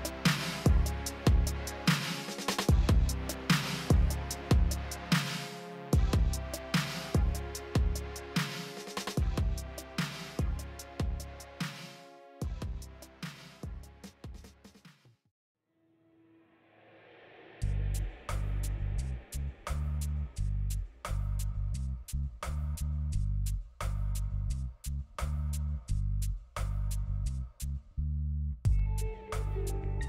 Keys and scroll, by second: 16.8 f, 19.9 f, 22.5 alt+x.